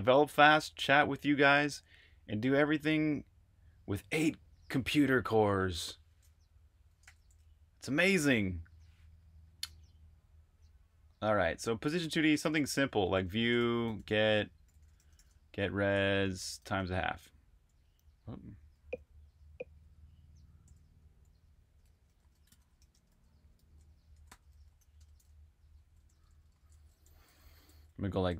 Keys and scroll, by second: 6.9 shift+a, 12.0-15.6 typing, 18.3 typing, 20.3-25.0 typing, 27.2 typing.